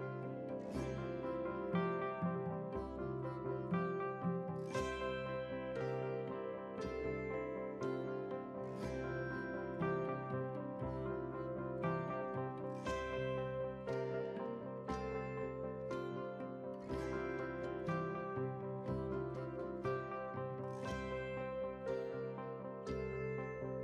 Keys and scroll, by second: 2.5 ctrl+r.